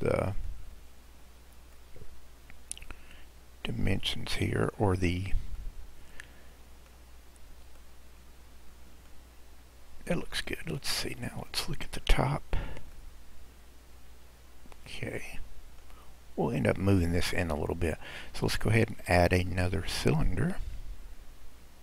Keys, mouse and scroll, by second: 0.3-1.9 drag, 5.0-5.7 scroll down 2, 5.7-7.2 middle drag, 7.2-7.8 scroll down 2, 7.8-9.4 middle drag, 9.4-10.0 scroll up 2, 10.0-11.3 scroll up 2, 11.3 click, 13.1-16.1 middle drag, 17.5-18.4 scroll down 2, 18.4 click, 18.8-19.5 scroll down 2, 19.5 middle click, 20.1-21.1 scroll down 7.